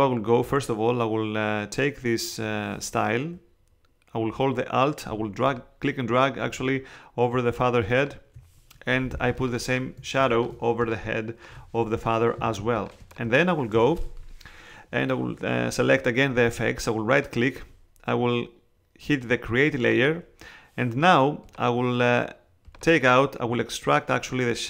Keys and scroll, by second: 9.1 alt+space, 12.3 space.